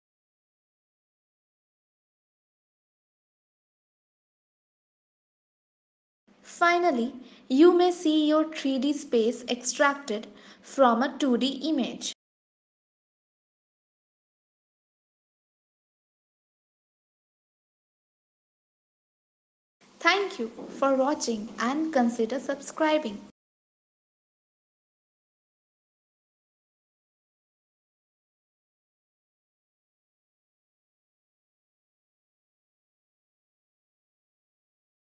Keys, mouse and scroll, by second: 1.0 g, 1.7 g, 3.1 g, 3.4 click, 4.1 ctrl+s, 6.8 shift+a, 9.8 s, 12.1 g, 14.2 g, 18.4 g.